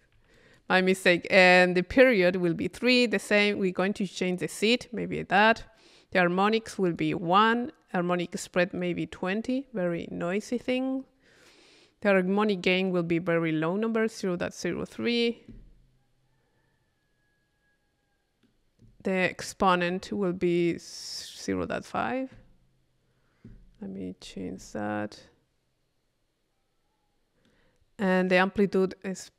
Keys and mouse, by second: 3.8-5.3 drag, 6.7-8.6 drag, 8.9-10.0 drag, 10.0-11.7 middle drag, 10.2 click, 12.8-18.8 middle drag, 19.3 click, 20.8-23.9 middle drag, 27.5 middle click, 28.9-29.3 middle drag.